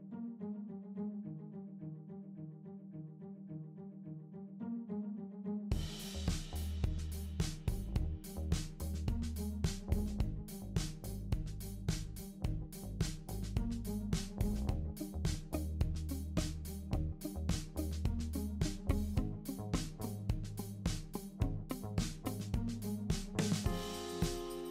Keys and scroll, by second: 16.6 ctrl+d, 17.5 ctrl+d, 18.3 ctrl+d, 18.9 super+d, 19.6 super+d, 20.3 super+d.